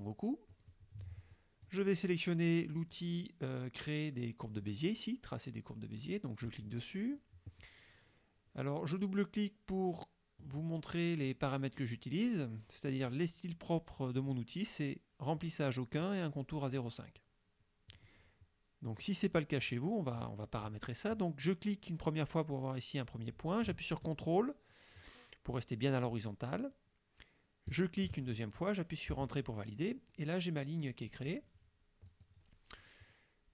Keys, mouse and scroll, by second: 1.4 click, 6.5 click, 10.5 click, 18.0 click, 19.7 click, 27.8 ctrl+click, 29.2 Return, 32.2 click.